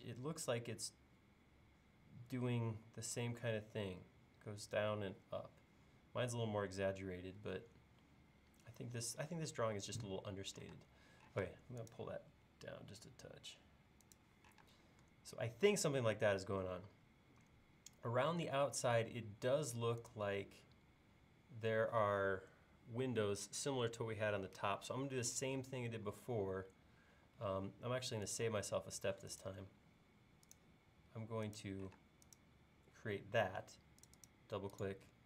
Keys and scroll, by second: 10.7-11.4 typing, 12.5 Caps_Lock, 14.6 space, 27.2 l, 32.0 space.